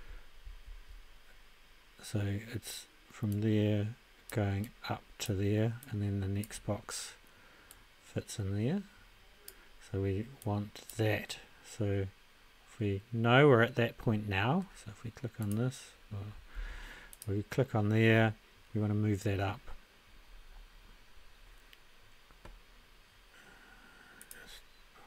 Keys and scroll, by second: 0.4 ctrl+a, 16.5 ctrl+a.